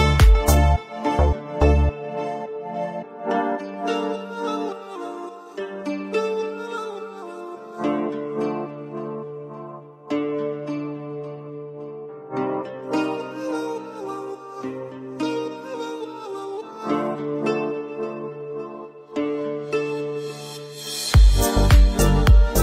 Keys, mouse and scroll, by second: 0.0 click, 0.1 middle drag, 0.6 shift+middle click, 1.5 click, 1.6-2.1 scroll up 1, 2.8-3.3 typing, 3.3 scroll down 2, 3.5 click, 3.7 scroll up 2, 3.7-4.3 middle drag, 4.5 scroll down 2, 4.6 shift+middle click, 4.8-5.2 drag, 5.2 middle click, 5.4 scroll up 2, 6.1 middle click, 6.3 scroll down 2, 6.5-7.1 shift+middle drag, 7.4 shift+middle click, 7.5 scroll up 2, 7.6 shift+middle click, 7.7 click, 8.1 q, 8.6 /, 8.9 shift+middle click, 9.0 scroll up 1, 9.1 Tab, 9.3 alt+click, 9.6 2, 10.0 click, 11.0 click, 11.5 middle click, 11.7 scroll down 1, 11.9 middle click, 12.3 scroll up 1, 12.4 Tab, 12.6-13.8 alt+drag, 13.8 Tab, 13.9 middle click, 14.0 scroll down 1, 14.1-14.9 shift+middle drag, 14.9-15.2 scroll up 1, 15.2 middle click, 15.3 `, 15.5 Tab, 15.6 middle click, 16.0 ctrl+r, 16.4 Tab, 16.5 click, 16.6 middle click, 16.8 scroll down 1, 16.9 /, 17.3 middle click, 18.2-18.5 shift+middle drag, 18.5 scroll up 1, 18.6 click, 18.8 Tab, 19.1 Tab, 19.7 click, 19.8 Tab, 19.9 Tab, 20.1 q, 20.5 middle click, 20.8 Tab, 21.0 middle click, 21.1 Tab, 21.5 click, 21.6 Tab, 21.8 click, 22.5 Tab.